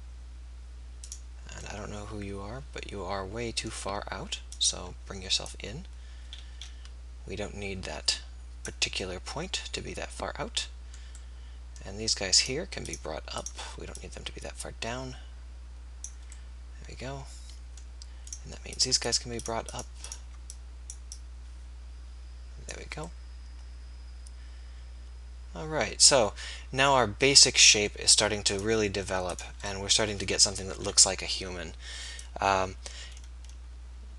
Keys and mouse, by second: 20.8 click, 30.7 KP_3.